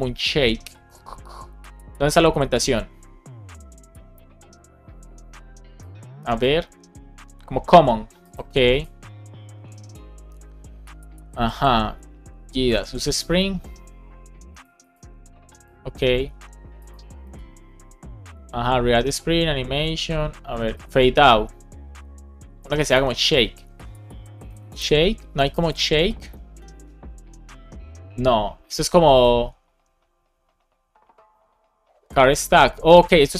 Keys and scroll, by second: 22.9 super+f, 25.2 Return.